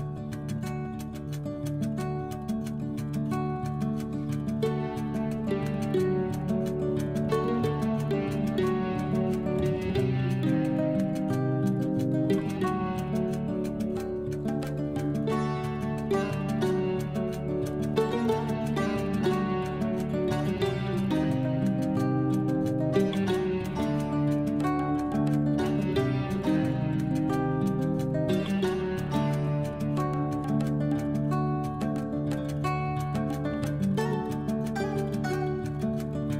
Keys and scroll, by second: 11.6 F12, 12.7 1, 13.2 5, 13.6 Return.